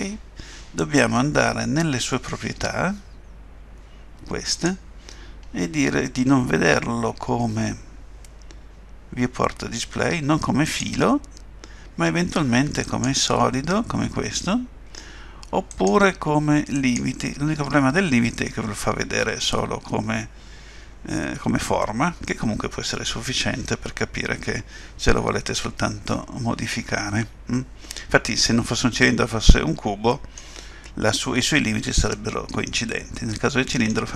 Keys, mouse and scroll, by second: 4.5 click, 5.3-6.0 scroll down 2, 6.0 scroll down 2, 7.7 scroll down 1, 10.6 click, 15.7 click, 21.1 scroll down 1, 21.2 middle click, 32.1 middle click.